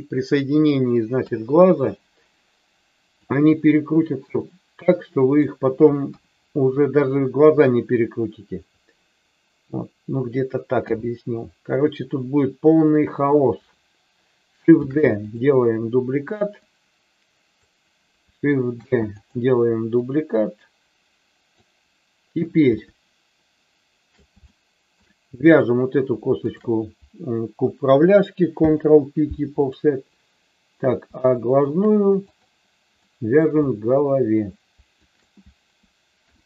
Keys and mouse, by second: 1.1 KP_3, 3.2-5.5 drag, 6.1 KP_1, 10.7 KP_7, 14.7 shift+d, 15.2 click, 16.5-17.6 drag, 18.7 shift+d, 20.0-21.4 drag, 22.7-24.2 shift+middle drag, 24.4 shift+middle click, 26.3 shift+click, 28.6 ctrl+p, 31.2 shift+middle click, 32.3 click, 33.0 middle click, 35.0 shift+click, 36.1 ctrl+p.